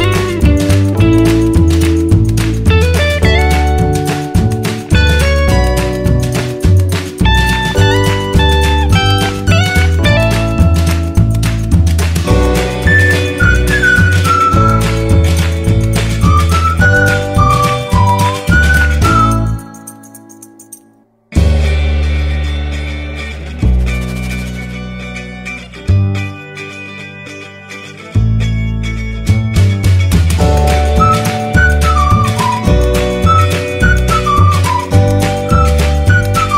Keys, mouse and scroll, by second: 5.2 ctrl+t, 13.4 Down, 20.1-32.4 drag.